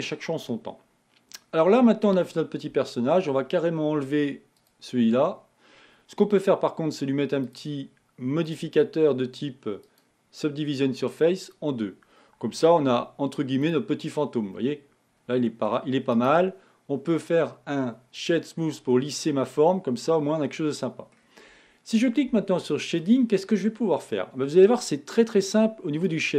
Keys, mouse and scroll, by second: 4.8 click, 7.6 click, 9.0-12.0 drag, 13.2 z, 14.3-14.8 scroll down 2, 14.8-16.2 middle drag, 16.2 scroll up 1, 16.4-19.1 right drag, 19.1-21.5 middle drag, 21.5-23.6 scroll up 1, 23.6 scroll up 1, 23.7 click.